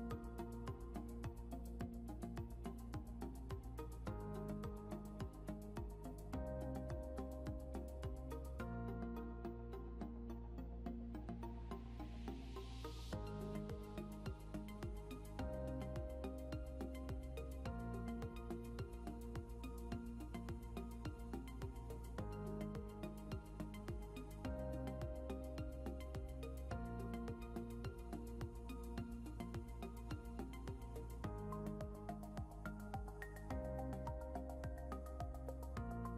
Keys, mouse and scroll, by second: 0.2 right click, 1.5 scroll up 1, 2.4 F12, 4.2 click, 8.3 click, 18.8 click, 21.6 click, 24.1 right click, 26.9 right click, 29.1 right click, 31.2 click, 33.1 click, 35.2 right click.